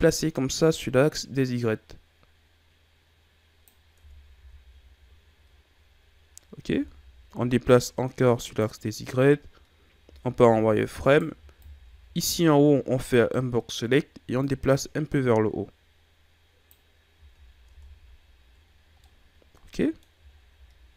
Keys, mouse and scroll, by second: 3.9 Tab, 4.3 a, 4.6-5.7 scroll down 2, 5.7-6.7 scroll up 6, 6.7 Tab, 7.6 click, 9.9 z, 10.9 right click, 11.2 b, 14.3 click, 17.1 z, 17.4 scroll down 2, 17.6 Tab, 18.9-20.2 middle drag, 20.2-20.7 shift+scroll down 2, 20.7-20.9 scroll up 4.